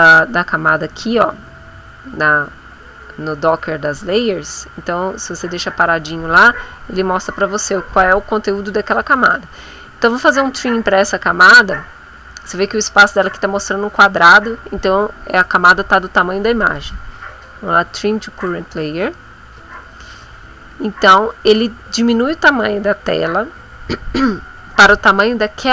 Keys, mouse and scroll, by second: 16.7 click, 18.3 click.